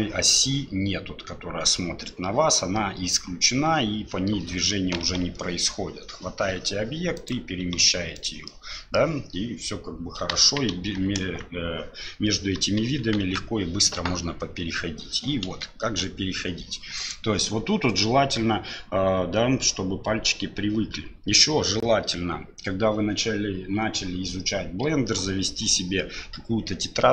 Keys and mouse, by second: 5.0 g, 7.6 g, 8.5 click, 10.2 KP_7, 10.3 KP_1, 10.8 KP_3, 11.2 KP_1, 12.6 KP_7, 12.9 KP_1, 13.2 KP_3, 15.5 KP_7, 17.0 click.